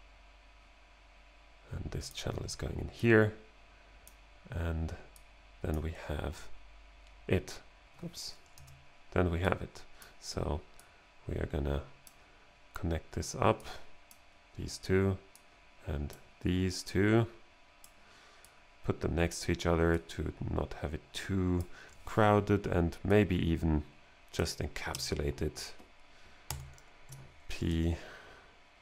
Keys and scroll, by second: 8.6 BackSpace, 26.5 shift+super+e.